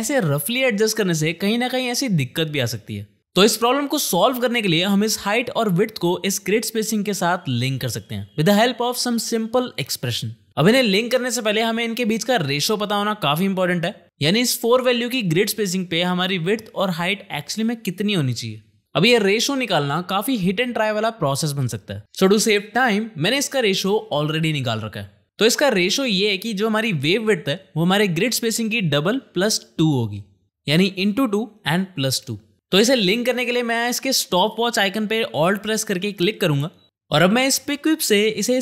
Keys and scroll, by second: 0.5 space, 4.0 shift+/.